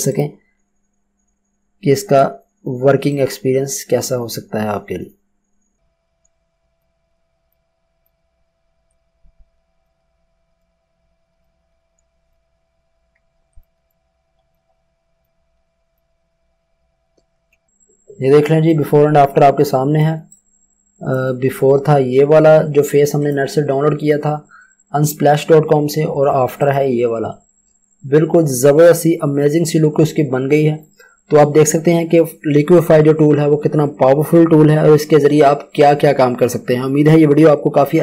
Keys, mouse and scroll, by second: 1.7 ctrl+t, 6.4 Return, 6.8 click, 7.5 click, 8.7 ctrl+z, 8.9 click, 10.1 ctrl+t, 10.6 alt+shift+click, 12.1 Return, 12.3 click, 13.6 ctrl+click, 13.9 click, 17.3 Return, 18.6 click, 20.3 click, 23.2 click, 26.5 click.